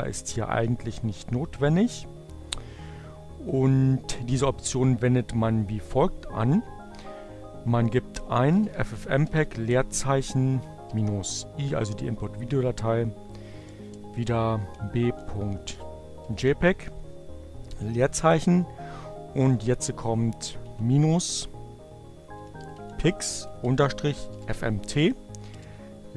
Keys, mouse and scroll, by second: 7.0-10.6 typing, 12.8 space, 14.3-15.6 typing, 17.1 space, 19.8-21.2 typing, 22.7-23.7 typing.